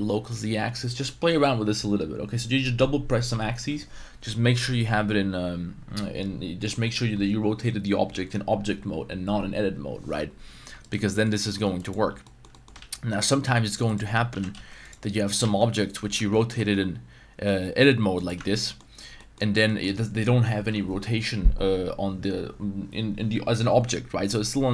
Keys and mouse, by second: 0.9 right click, 10.8 shift+right drag, 11.1 middle click, 11.6 x, 12.2 middle drag, 12.5 middle drag, 12.7 shift+a, 14.3 g, 14.5 z, 14.8-15.3 drag, 15.4 shift+a, 16.1 Tab, 16.5 r, 18.4 Tab, 18.5 middle drag, 19.2 middle click, 19.6 middle drag.